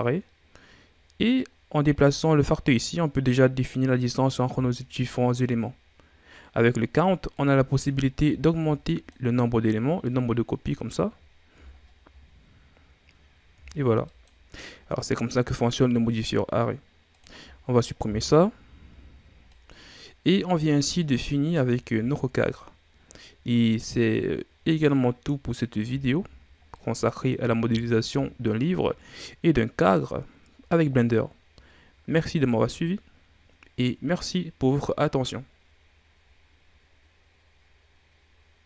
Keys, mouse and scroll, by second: 2.2-5.3 drag, 7.3 click, 8.0 scroll down 3, 8.4 ctrl+scroll up 3, 8.8-10.0 middle drag, 10.0 click, 10.9-11.7 scroll down 4, 11.7 ctrl+scroll up 2, 12.1-12.7 scroll down 4, 12.7-13.2 scroll up 6, 13.7-14.1 ctrl+scroll down 3, 14.1 middle click, 14.7-15.5 scroll up 3, 17.1 click, 17.5-18.8 ctrl+scroll down 3, 18.8 Delete, 19.5-20.6 middle drag, 20.6-21.2 scroll down 5, 21.2-21.8 middle drag, 21.8-22.1 ctrl+scroll down 1, 22.1 scroll up 2, 23.0 scroll down 4, 24.6 click, 26.3-26.7 scroll down 1, 26.7-27.8 middle drag, 27.8-28.5 scroll down 2, 28.5 middle click, 29.3-31.5 scroll up 1.